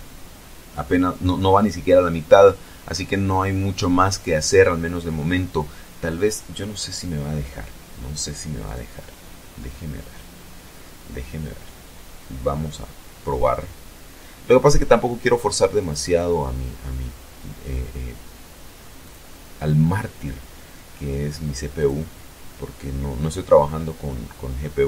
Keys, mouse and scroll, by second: 7.6 right click, 14.8 click, 18.1 click, 20.7 click.